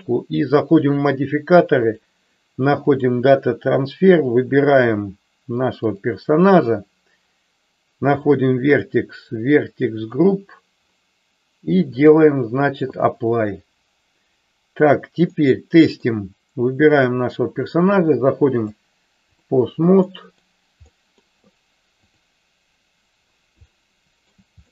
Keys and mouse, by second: 1.9-3.0 drag, 4.1 click, 8.1 click, 8.7 click, 11.9-13.3 drag, 15.4 middle click, 17.0 click, 18.5-19.5 drag, 20.0 middle click, 20.9 middle click, 22.5 click, 23.8 shift+middle click.